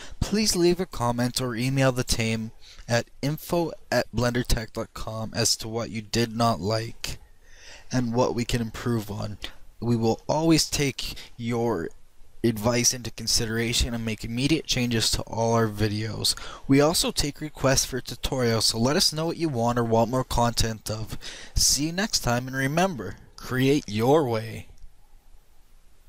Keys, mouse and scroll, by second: 1.8-4.6 middle drag, 6.6 click, 9.7-16.5 middle drag.